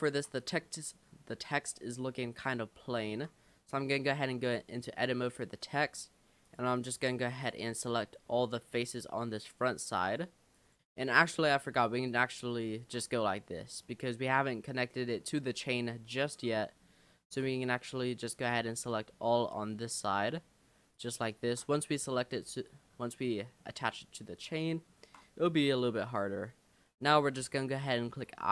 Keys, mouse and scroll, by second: 0.1 Tab, 0.4 click, 0.8-2.4 middle drag, 2.4 click, 2.8-3.1 scroll up 4, 3.1 Tab, 4.0 shift+middle click, 4.3-4.7 shift+scroll up 1, 5.4 click, 6.5 shift+click, 6.8 shift+click, 7.1 shift+click, 7.4 shift+click, 7.8 shift+click, 8.4 shift+middle click, 8.8 shift+click, 9.4 shift+click, 10.0 shift+click, 10.5 shift+click, 10.8-11.3 scroll down 10, 11.3 shift+middle click, 12.1 shift+click, 13.2 scroll up 1, 13.8-15.8 middle drag, 15.8-16.5 scroll up 5, 16.5-18.1 middle drag, 18.1 click, 18.6-19.4 scroll up 13, 20.0 shift+click, 20.9 shift+click, 21.7-22.4 scroll down 10, 22.5-23.1 scroll up 5, 23.4 shift+middle click, 23.7 shift+scroll down 1, 24.1-25.1 shift+middle drag, 25.3 scroll down 2.